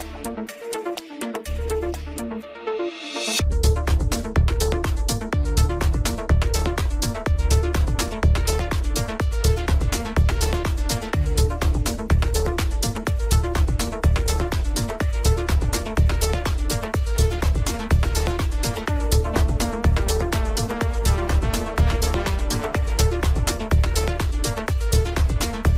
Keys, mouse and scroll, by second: 5.7-7.3 scroll up 3, 7.3 click, 8.5 shift+click, 9.1-11.5 middle drag, 11.5-13.2 scroll up 1, 13.2 shift+d, 15.0-15.5 scroll down 2, 15.5 Tab, 15.6 Tab, 18.6 click, 19.0 KP_Decimal, 19.3 KP_1, 22.2-22.6 scroll up 1, 22.6 r, 23.3 ctrl+z.